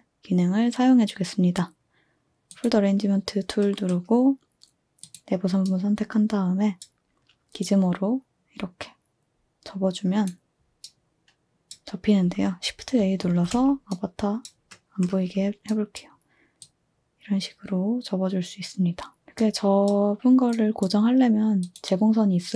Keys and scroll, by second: 13.2 a.